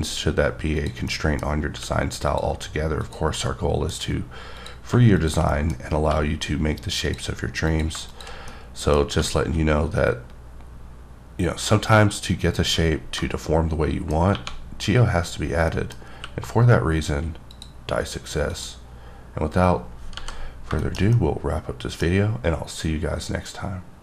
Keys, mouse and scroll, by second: 0.8 click, 1.1 middle click, 2.3 click, 2.4 g, 3.0 click, 3.4 middle click, 4.6 click, 5.5 middle click, 5.8-7.1 scroll up 6, 6.1 g, 7.1 click, 7.7 click, 8.1 shift+click, 8.4 scroll down 1, 8.5 middle click, 9.9-11.5 scroll down 7, 11.5-12.4 scroll down 4, 12.5 click, 12.8-13.1 scroll down 2, 13.2 middle click, 14.3 1, 15.2-15.7 scroll up 1, 15.7 middle click, 16.1 q, 17.5 click, 18.5 click, 20.2 h, 20.5 scroll down 1, 20.8 shift+middle click.